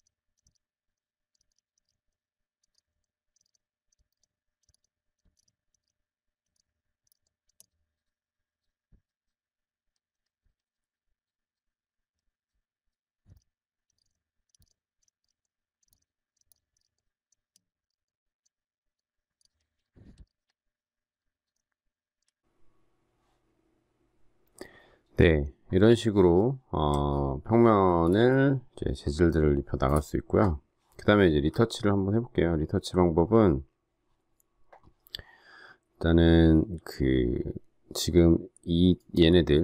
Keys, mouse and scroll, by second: 0.0 alt+click, 0.5 ctrl+e, 1.0 alt+click, 1.5 ctrl+e, 1.8 ctrl+t, 2.3 alt+shift+click, 2.5 alt+shift+click, 2.7 Return, 3.0 alt+click, 3.4 ctrl+e, 3.5 alt+click, 4.1 ctrl+e, 4.2 alt+click, 4.6 alt+shift+click, 4.7 ctrl+e, 4.8 alt+click, 5.4 ctrl+e, 5.8 ctrl+t, 6.0 shift+click, 6.5 Return, 7.2 ctrl+t, 7.2 alt+shift+click, 7.6 Return, 13.3 ctrl+t, 13.5 shift+click, 13.9 Return, 14.1 alt+click, 14.4 alt+shift+click, 14.6 ctrl+e, 14.7 alt+shift+click, 15.2 ctrl+e, 15.4 alt+click, 15.9 ctrl+e, 16.0 alt+shift+click, 16.5 ctrl+e, 16.8 ctrl+t, 17.1 alt+shift+click, 17.5 Escape, 17.9 ctrl+t, 18.1 alt+shift+click, 18.8 shift+click, 19.4 Return, 20.2 w, 21.5 z, 21.9 alt+click, 22.1 alt+click, 22.1 alt+double click, 27.0 alt+scroll up 1, 28.0 space, 31.6 alt+scroll down 1.